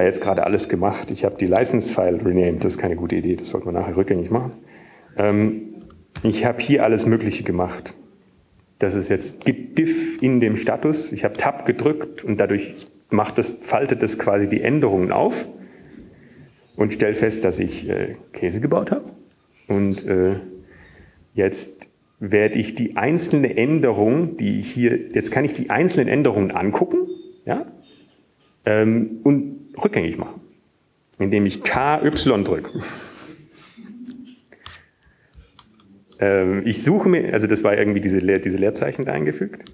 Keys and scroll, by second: 0.4 typing, 2.3 typing, 5.8-8.7 typing, 9.7-11.7 typing, 17.3-18.5 typing, 19.1 Up, 20.3 Up, 24.9 Down, 35.3-36.1 typing, 39.6-39.7 typing.